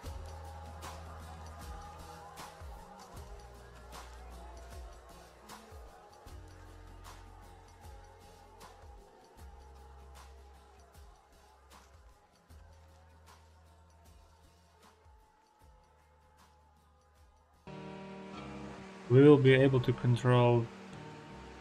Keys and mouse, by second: 1.0 click, 1.6 click, 4.7 click, 6.0 click, 10.4 middle click, 16.0 middle click, 16.5 middle click, 17.5-21.6 drag, 17.6 ctrl+z.